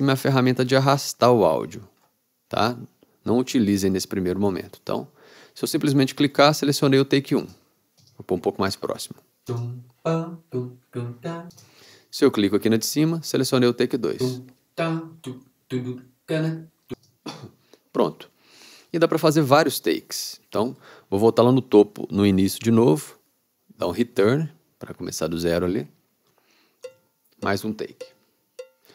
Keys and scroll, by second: 3.7 super+z, 24.2 Return, 26.9 r.